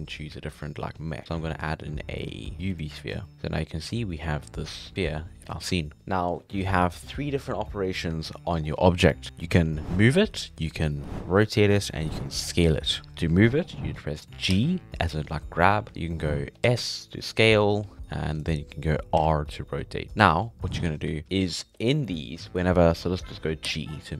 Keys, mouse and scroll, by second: 3.1-3.6 scroll up 2, 3.2 middle click, 3.6-5.3 scroll down 2, 14.5 g, 16.7 s, 19.2 r, 20.6-20.9 scroll down 1, 20.9-21.3 scroll up 1, 23.7 g.